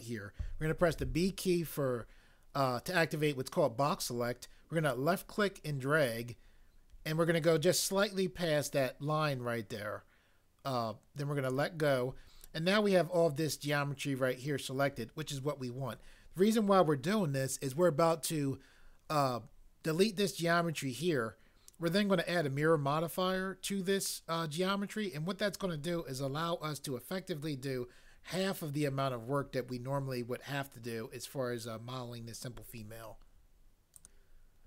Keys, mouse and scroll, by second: 1.0 b.